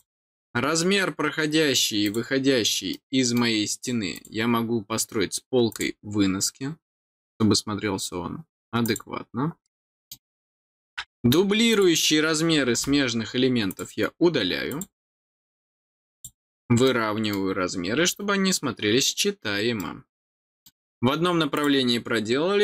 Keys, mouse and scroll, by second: 2.0 click, 2.9 middle click, 4.1 click, 5.7 click, 8.8 click, 9.6 middle click, 11.7 click, 13.6 click, 14.6 click, 16.1 click, 16.8 middle click, 19.7 middle click, 21.5 click.